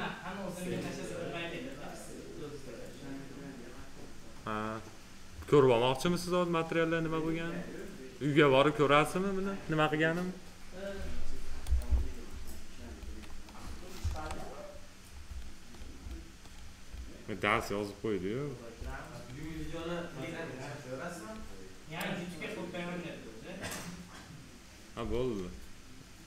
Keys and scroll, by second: 13.9 ctrl+s.